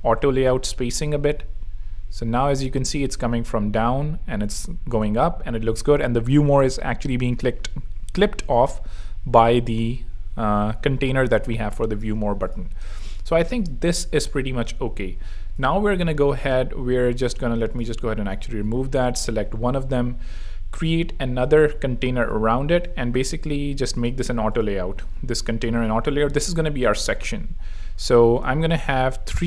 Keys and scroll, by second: 0.0 super+Return, 0.0 super+3, 0.9 super+r, 10.1 super+2, 12.3 z, 12.8 alt+space, 13.3 v, 13.9 alt+v, 15.8 super+x, 18.0 alt+super+x, 20.6 alt+super+g, 25.7 shift+a.